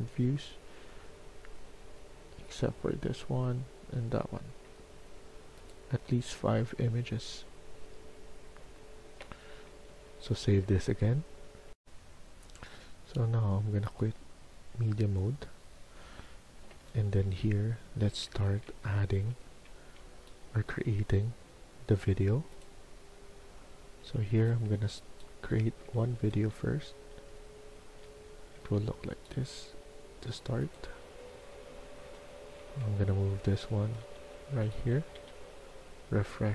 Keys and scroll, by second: 11.6 F1, 16.7-19.6 typing, 23.9-26.7 typing, 28.2-28.6 typing, 31.7-32.6 typing, 33.9-35.2 typing.